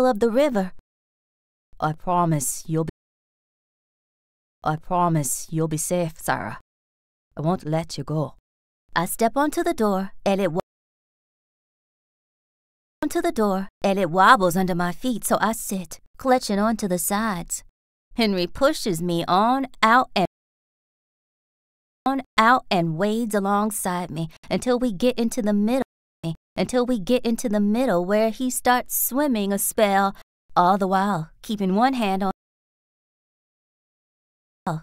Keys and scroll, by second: 0.3 s, 2.8 space, 3.7 a, 4.1 space, 5.4 s, 8.1 s, 10.5 space, 12.2 BackSpace, 12.9 space, 13.4 r, 17.2 r, 20.1 space, 21.5 BackSpace, 21.9 space, 22.5 r, 25.7 space, 26.6 r, 29.9 s, 32.2 space, 34.0 BackSpace, 34.5 space.